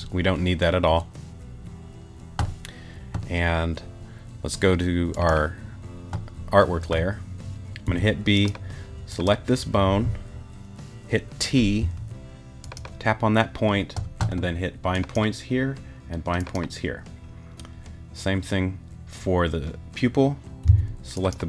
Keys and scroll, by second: 7.9 b, 11.8 t, 20.7 b.